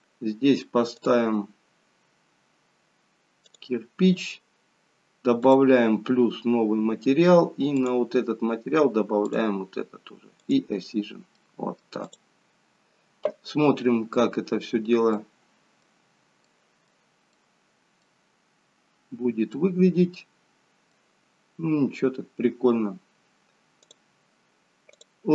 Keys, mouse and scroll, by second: 1.0 click, 5.4 click, 7.7 click, 11.3 click, 11.3 middle click, 13.3 click, 13.3-14.1 scroll down 2, 14.2-15.1 scroll down 5, 15.1 middle click, 15.1 scroll down 8, 18.4-19.2 scroll up 12, 19.5 middle click, 21.2-21.8 scroll up 1, 21.8 scroll up 1, 22.1-23.9 scroll down 2, 23.9 click.